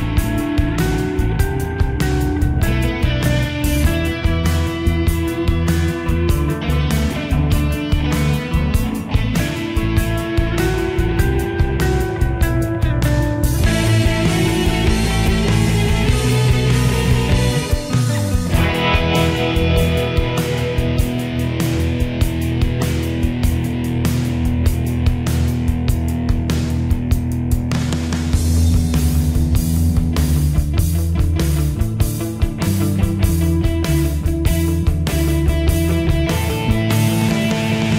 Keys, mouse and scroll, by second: 6.8 right click, 9.0 click, 16.2-27.0 drag, 27.1-37.9 drag.